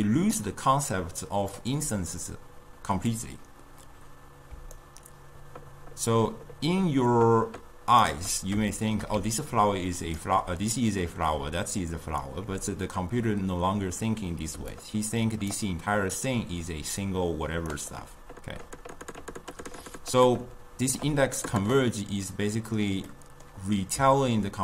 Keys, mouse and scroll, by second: 0.0-2.2 typing, 1.1 click, 4.6 d, 4.8-7.9 right drag, 8.2 d, 8.8-9.3 shift+middle drag, 9.3 d, 9.5 click, 10.3 d, 10.3 d, 11.5 d, 11.7 click, 12.3 d, 14.7 d, 14.9 right click, 15.8-16.1 d, 16.3-17.8 drag, 17.8 d, 17.8 d, 18.0-21.0 right drag, 21.0 d, 22.0-24.6 middle drag.